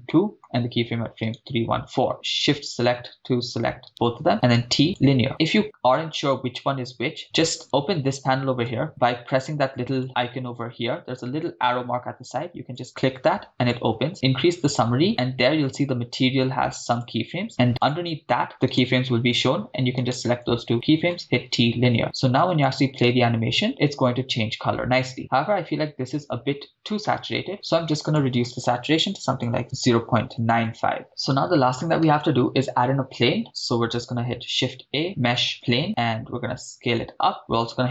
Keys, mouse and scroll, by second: 0.1 middle click, 1.2 click, 1.2 right click, 2.1 shift+right click, 3.9 shift+right click, 4.6 t, 5.3 middle click, 7.6 click, 10.0 click, 12.8-13.8 drag, 16.9-17.9 drag, 18.7 click, 18.7 right click, 20.0 shift+click, 20.0 shift+right click, 22.3 click, 23.0 shift+space, 27.1 shift+space, 28.1-29.6 drag, 30.4 click, 31.3 shift+space, 34.4 shift+a, 35.8 s, 37.4 click.